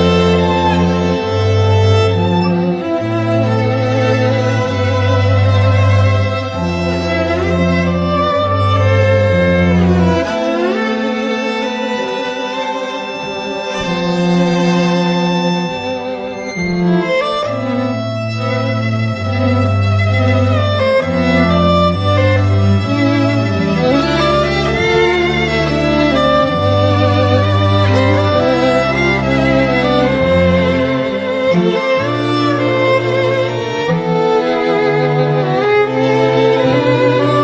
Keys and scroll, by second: 1.2 ], 1.6 ], 7.1 [, 12.4 ], 12.6 ], 19.9 [, 20.3 [, 22.0 [, 23.6 [, 27.8 ], 27.9 ], 28.1 ], 28.3 ], 36.3 ].